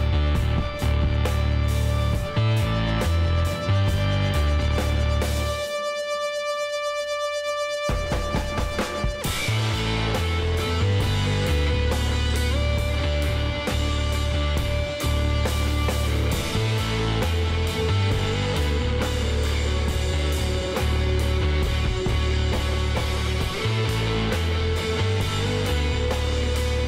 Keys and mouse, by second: 2.6 w, 7.1-17.5 middle drag, 17.5 k, 20.0-21.9 drag, 20.8 k.